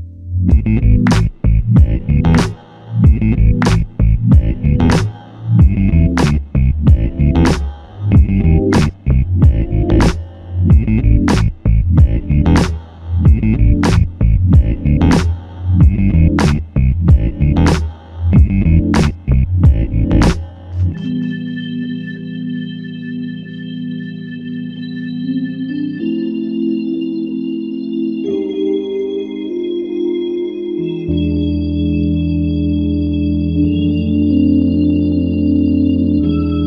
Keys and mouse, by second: 3.1 double click, 8.3 alt+shift+click, 8.8 alt+click, 10.0 shift+click, 11.1 shift+click, 14.5 double click, 18.6 shift+click, 19.7 alt+click, 20.3 alt+click, 23.4 alt+click, 24.4 ctrl+click, 25.6 f, 26.4 ctrl+click, 31.9 shift+click, 35.3 ctrl+click.